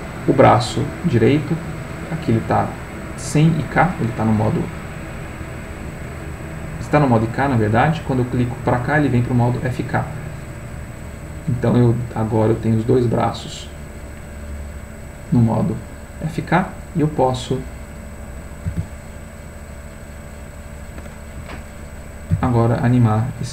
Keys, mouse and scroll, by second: 5.7 click, 6.6 click, 10.7 click, 12.3 middle click, 13.6 middle click, 15.0 click, 17.3 click, 18.6 r, 21.4 Escape, 21.9 click, 22.3 r.